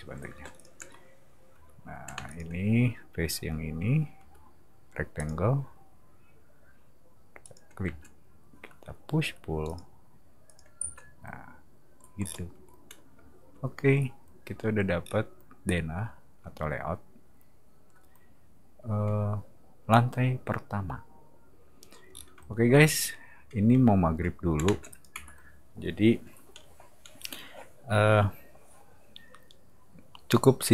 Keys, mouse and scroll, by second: 0.3 space, 0.5 click, 2.1 space, 2.3 click, 5.2 click, 7.4 click, 7.8 space, 9.2 p, 9.7 click, 10.5 click, 10.8 space, 12.2 scroll down 2, 15.0 middle click, 22.1 middle click, 22.1 scroll down 2, 24.6 space, 24.9 click.